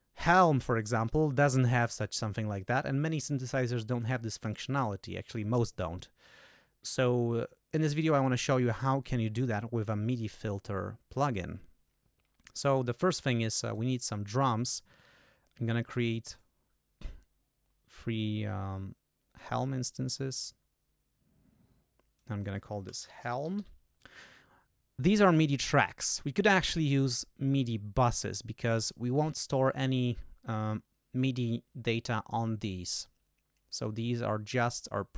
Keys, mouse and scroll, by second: 13.4 click, 13.6 right click, 15.9 click, 16.3-19.3 scroll up 2, 19.3 scroll up 1, 20.1-20.4 scroll up 2, 21.0-21.8 scroll down 6, 22.1 click, 22.8-24.1 typing, 28.1 click, 33.7 click.